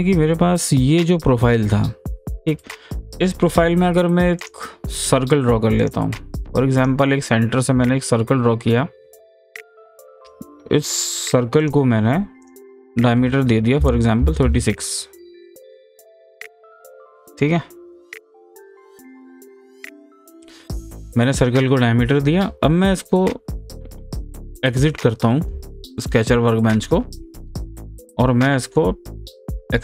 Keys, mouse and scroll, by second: 4.4 click, 5.8 click, 6.8 click, 10.1 click, 10.2 click, 11.7 click, 14.3-14.9 typing, 17.0 click, 17.0 typing, 20.0 click, 20.1 scroll up 1, 20.4 scroll down 1, 21.5 scroll up 1, 24.9 click, 26.0-29.8 middle drag, 26.9-27.7 typing.